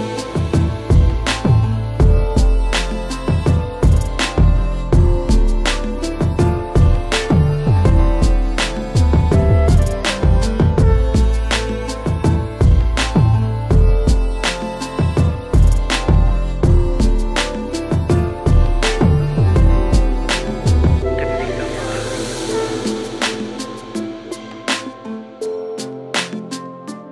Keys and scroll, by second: 7.4 alt+shift+Return, 8.3 shift+Return, 12.8 shift+Return, 15.8 ctrl+j, 19.7 space.